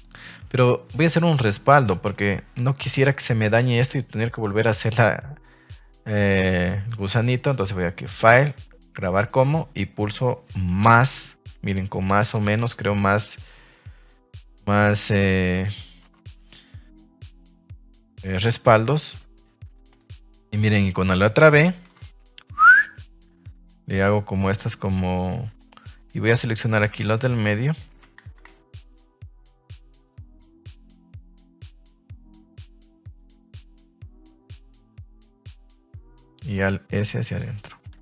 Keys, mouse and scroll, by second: 0.0 alt+shift+right click, 0.8 middle click, 1.1 shift+middle click, 1.7 middle click, 2.3 ctrl+s, 2.9 middle click, 3.3 middle click, 3.9 middle click, 5.0 middle click, 8.0-9.2 drag, 18.3 middle click, 19.2 Tab, 19.6 Tab, 20.0 shift+middle click, 20.5 middle click, 20.9 middle click, 21.8 ctrl+b, 26.5 alt+right click, 27.6 alt+shift+right click, 28.3 ctrl+z, 30.5 alt+shift+right click, 31.2 alt+shift+right click, 31.9 alt+shift+right click, 32.2 middle drag, 32.6 shift+middle drag, 33.5 alt+shift+right click, 33.9 shift+middle drag, 34.6 alt+shift+right drag, 35.9 alt+shift+right click, 37.6 click, 37.9 Tab.